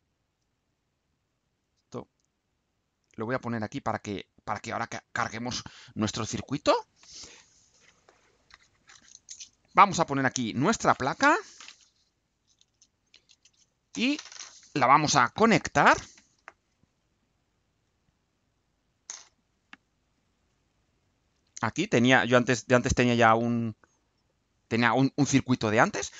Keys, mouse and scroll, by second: 0.0-2.0 drag, 3.2-4.6 drag, 5.0-6.8 drag.